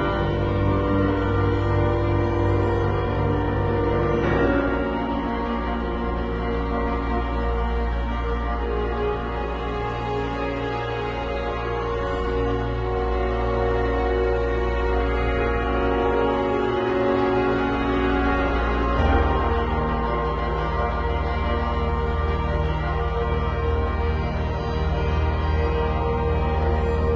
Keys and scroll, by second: 4.6 z, 5.2 space, 5.7 v, 8.9 super+-, 9.7 super+t, 19.1 super+t, 23.6 Return, 23.8 Down, 25.6 shift+super+t, 26.0 shift+super+t.